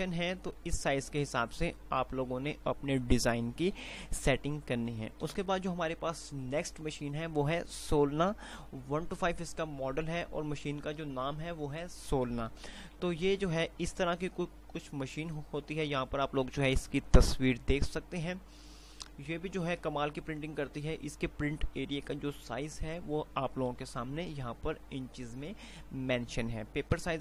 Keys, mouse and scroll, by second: 5.1 F5, 5.6 Page_Down, 13.6 F5.